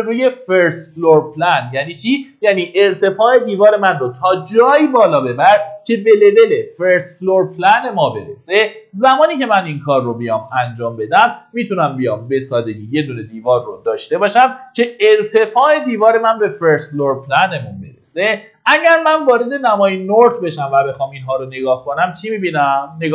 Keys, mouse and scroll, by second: 14.1 Escape, 17.5-18.6 scroll down 1, 19.9 click, 21.2 middle click.